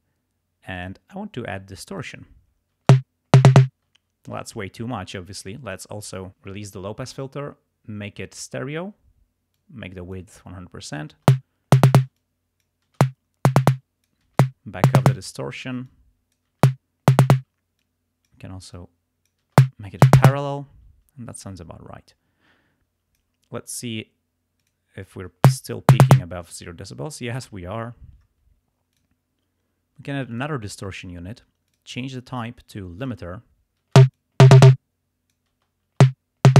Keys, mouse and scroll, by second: 0.8 click, 2.1 click, 2.9 space, 4.0 space, 5.0-6.0 drag, 8.4 click, 9.6 click, 11.2-15.2 typing, 12.2 click, 13.8 click, 15.9 click, 16.6 space, 17.4 space, 17.9 click, 18.8 click, 19.6 space, 20.8 space, 22.1-23.5 drag, 24.6 click, 25.5 space, 27.1 space, 29.0 click, 30.4 click, 31.7 click, 33.1 click, 34.0 space, 34.3 click, 34.6 click, 35.6 space.